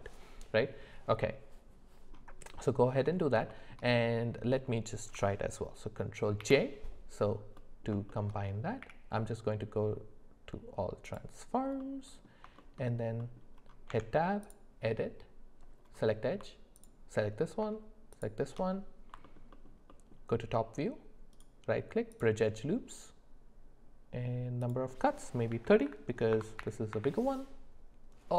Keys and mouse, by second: 2.5 middle click, 3.5 shift+middle click, 3.9 middle click, 6.4 ctrl+j, 7.6 middle click, 8.1 shift+middle click, 8.8 q, 11.8 middle click, 12.6 shift+middle click, 13.2 middle click, 13.9 Tab, 16.7 alt+click, 19.2 alt+middle click, 19.5 alt+middle click, 19.9 alt+middle click, 21.3 right click, 24.7-26.9 drag.